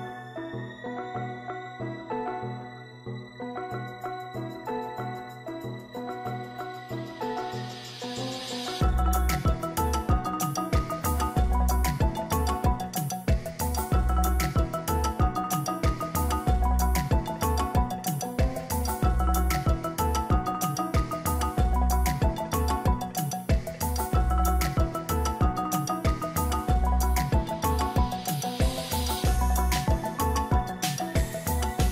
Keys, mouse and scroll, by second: 17.9 ctrl+j, 18.6 ctrl+click, 26.8-29.7 scroll down 1.